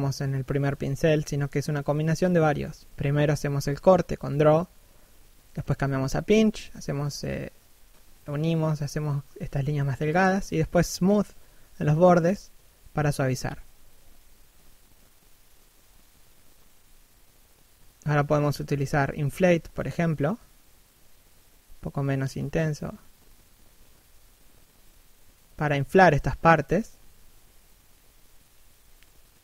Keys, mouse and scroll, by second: 0.1 click, 2.8 click, 3.3 shift+middle click, 3.8 s, 3.9 click, 5.4 shift+middle click, 5.7 click, 6.4 scroll down 1, 6.6 shift+middle click, 7.0 click, 8.4 shift+middle click, 8.8 click, 10.3 shift+middle click, 10.7 click, 11.3 scroll down 1, 11.5 middle click, 14.8 scroll up 1, 15.0 middle click, 15.6-16.6 scroll up 1, 16.6 i, 17.6 click, 19.3 click, 22.4 click, 23.2 click, 23.7 shift+middle click, 24.1 click, 24.9 click, 25.5 click, 25.9 scroll down 1, 26.1 middle click, 27.5 click.